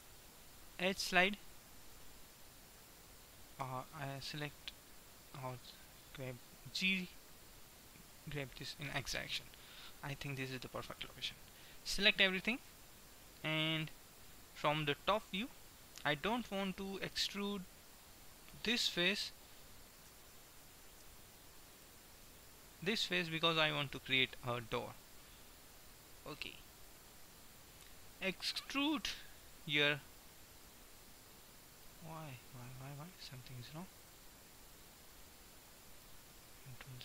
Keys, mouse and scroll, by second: 3.7 g, 8.3-10.7 middle drag, 12.3 a, 12.7 a, 15.5 KP_7, 17.3-19.3 drag, 19.3-20.3 right drag, 20.2 a, 20.7 a, 21.8-26.5 middle drag, 26.8 KP_1, 29.3 e, 34.2-35.8 drag, 36.7 ctrl+z.